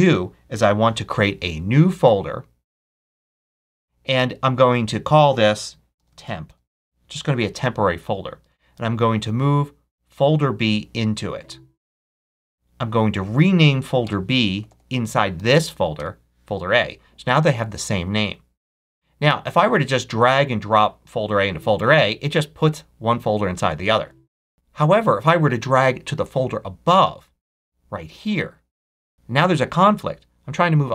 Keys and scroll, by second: 5.6-6.8 typing, 13.9 Return, 14.4 Right, 14.9 BackSpace, 15.2 shift+a, 15.8 shift+Return, 23.7 super+z.